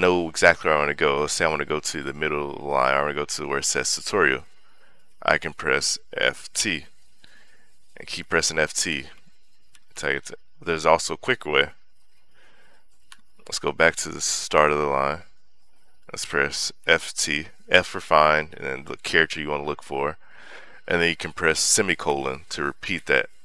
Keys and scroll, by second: 6.2 t, 7.8-11.2 typing, 12.9 Escape, 14.4 0, 16.6 f, 17.0 t, 22.4 ;.